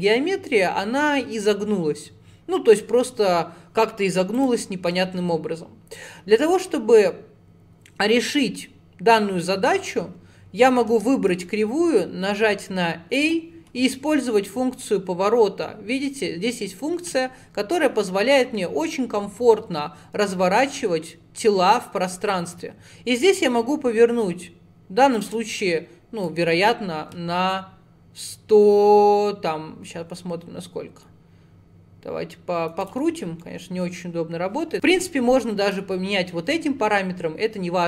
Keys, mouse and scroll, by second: 4.4 click, 9.9 scroll down 3, 10.9 Tab, 11.4 a, 13.3-14.5 drag, 26.3 click, 33.2-33.5 scroll up 2, 33.5-34.7 middle drag, 35.8-37.8 drag.